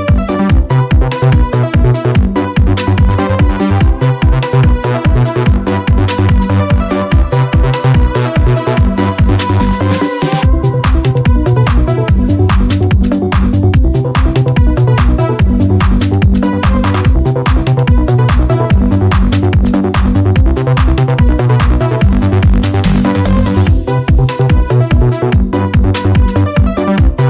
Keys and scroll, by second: 0.0 x, 3.9 ctrl+d, 5.8-7.7 typing, 10.1 ctrl+z, 17.3 ctrl+z, 19.4 ctrl+z, 21.9 ctrl+z, 22.9 ctrl+z, 25.8 ctrl+z.